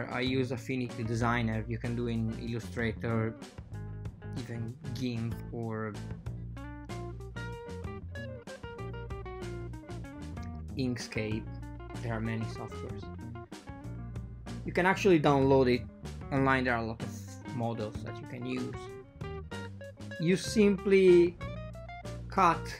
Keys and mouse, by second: 0.9 KP_1, 1.3 KP_3, 1.7 KP_7, 2.6 ctrl+r, 10.2 ctrl+r, 11.8 super+z, 12.5 ctrl+r, 14.8 ctrl+r, 16.4 ctrl+r, 18.4 ctrl+r, 20.0 Escape, 20.0 a, 20.1 ctrl+r, 22.3 ctrl+r.